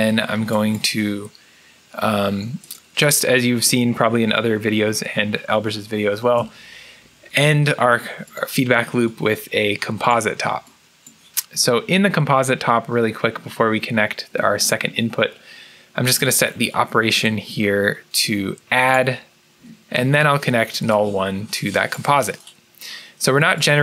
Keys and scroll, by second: 5.6-6.7 typing.